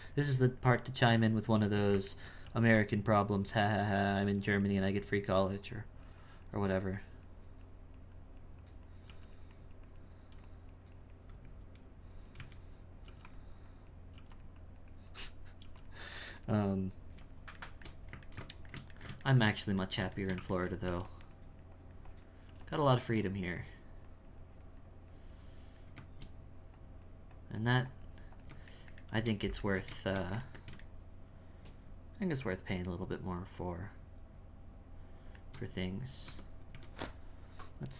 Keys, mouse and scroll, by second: 2.2 ctrl+middle click, 2.9-5.4 drag, 5.7 click, 7.0-9.1 drag, 9.5-11.4 drag, 11.4 z, 12.4 z, 13.7 click, 14.6-15.6 drag, 16.0-17.7 drag, 17.7-20.9 shift+middle drag, 21.3-22.5 drag, 22.9-28.8 drag, 28.8-33.9 shift+middle drag, 36.2 Tab, 36.7 a.